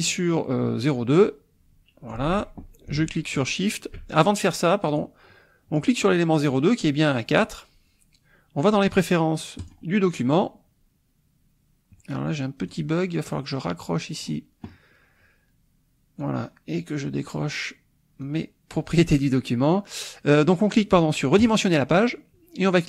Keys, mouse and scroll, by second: 1.2-2.3 drag, 2.3 ctrl+z, 3.3 shift+click, 4.2 shift+click, 4.9 click, 9.6 click, 12.4 click, 13.1-14.4 drag, 16.2-17.4 drag, 18.2 click, 21.4 click.